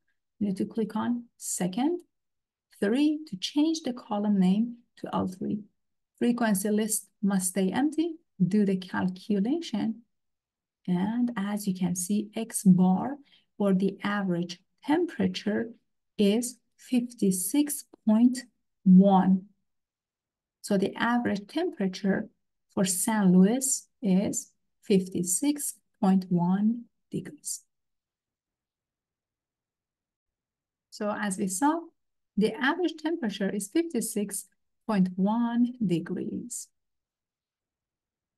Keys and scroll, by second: 2.9 3, 6.3 Down, 8.2 Down, 10.4 Return.